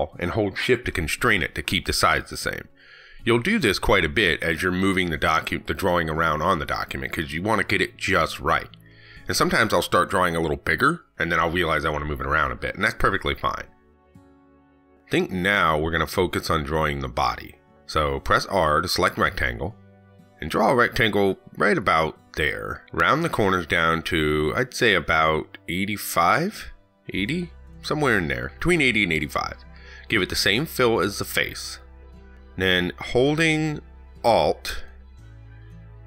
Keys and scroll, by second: 34.8 ctrl+z.